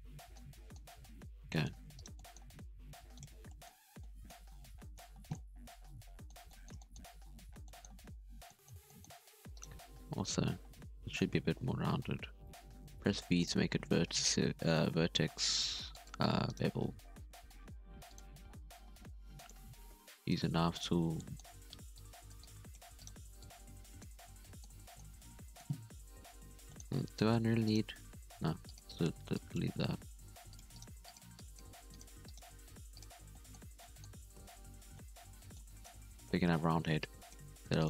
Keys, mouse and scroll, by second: 0.0 scroll down 1, 0.2 middle click, 0.4 alt+a, 0.5 middle click, 0.7-1.2 scroll up 4, 1.2 Tab, 1.5 middle click, 1.7 Tab, 1.9 right click, 2.1 middle click, 2.6 g, 3.3 Tab, 3.4-3.9 scroll down 5, 3.4 middle drag, 3.9-4.5 middle drag, 4.5 scroll down 1, 4.6-5.2 middle drag, 5.2 scroll down 1, 5.3-7.1 middle drag, 7.1 scroll up 5, 7.4 Tab, 7.6-8.1 middle drag, 8.1 alt+a, 8.5 middle click, 9.0-9.5 scroll up 2, 9.5 right click, 10.3 ctrl+b, 13.6-13.9 scroll up 1, 13.9 alt+a, 14.9 k, 17.5 k, 20.7 right click, 21.2 middle click, 21.9 click, 22.4 click, 23.0 right click, 23.4 click, 24.1 Tab, 24.3 middle click, 24.6 scroll down 3, 24.8 middle click, 25.0 Tab, 25.1 scroll up 2, 25.2 middle click, 26.1 KP_1, 26.7 shift+middle click, 26.8 scroll up 6, 27.1 alt+a, 27.3 z, 27.6 right click, 27.9 x, 28.9 z, 29.3 click, 30.0 g, 30.7 right click, 30.8 g, 31.3 click, 31.6 g, 32.2 right click, 32.5 g, 33.2 scroll down 3, 33.3 middle click, 33.7 scroll up 1, 33.7-34.3 middle drag, 34.3 Tab, 34.4 scroll down 4, 34.5 scroll up 1, 34.7 scroll down 1, 34.9-36.0 middle drag, 36.0 KP_1, 36.2 Tab, 36.5 scroll up 1, 36.7 z, 36.9 drag, 37.4 g.